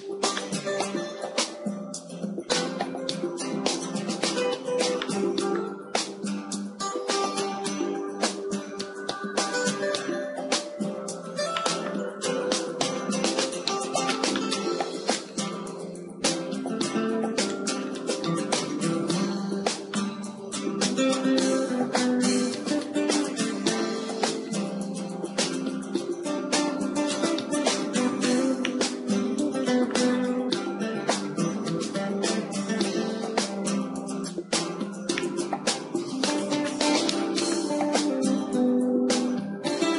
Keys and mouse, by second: 2.2 shift+h, 4.4 Tab, 4.9-7.8 middle drag, 6.6 KP_1, 7.8 KP_1, 10.2 w, 11.4 click, 12.1-17.4 middle drag, 15.3-16.4 drag, 16.8 w, 18.4 w, 18.6 w, 19.4 w, 19.8-21.8 middle drag, 22.5-26.3 right drag, 25.4 z, 26.3 x, 28.6-30.5 middle drag, 31.0 s, 34.2-36.4 right drag, 36.4-39.9 middle drag.